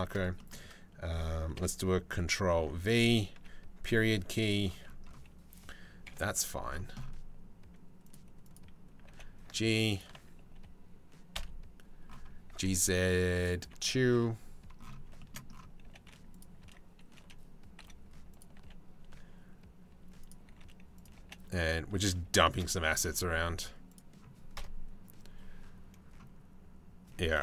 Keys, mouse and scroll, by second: 0.0 middle click, 1.2 KP_7, 2.3 ctrl+v, 3.0 KP_Decimal, 5.7 KP_7, 8.1 click, 8.7 g, 11.0 KP_3, 12.1 g, 13.8 KP_7, 15.5 g, 16.2 e, 17.4 r, 18.2 g, 20.1 r, 20.8 g, 22.1 shift+d, 23.0 r, 24.2 KP_0.